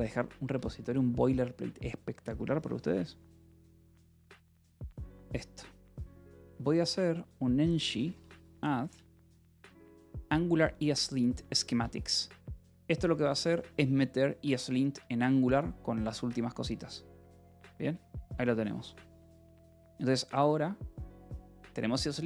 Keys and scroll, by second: 0.1 q, 0.3 Return, 4.0 ctrl+r, 5.8 Left, 8.1 BackSpace, 8.7 Right, 8.9 BackSpace, 9.3 a, 9.6 d, 10.1 Right, 11.7 BackSpace, 13.2 s, 14.3 Return, 17.7 y, 18.1 Return.